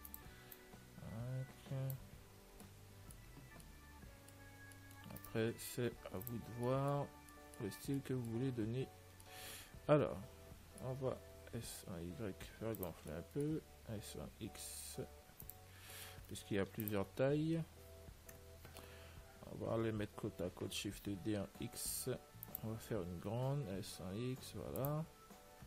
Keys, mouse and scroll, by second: 0.8 click, 2.8-7.7 middle drag, 5.5-7.3 right drag, 6.4 ctrl+s, 8.9 Tab, 10.5-11.6 middle drag, 11.6 s, 12.0 middle click, 13.4-16.0 middle drag, 14.3 s, 16.2-22.0 middle drag, 17.0 ctrl+s, 20.9 shift+d, 23.4 s, 25.4 middle click.